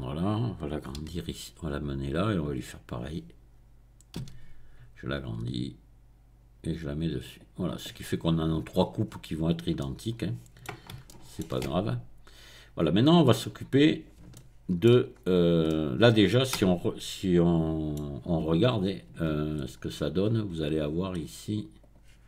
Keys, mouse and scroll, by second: 0.0 middle click, 1.1 g, 2.8 click, 3.2-4.7 middle drag, 4.2 s, 7.4 click, 9.0 middle click, 9.8-10.8 right drag, 10.8 shift+middle click, 11.1 shift+right click, 13.5 click, 14.8 shift+middle click, 15.1-15.6 scroll up 2, 15.6-18.8 middle drag, 18.5 Tab, 18.8-19.4 scroll up 1, 19.2 Tab, 19.7-21.4 scroll down 1, 21.4-21.8 scroll down 1, 21.8 click.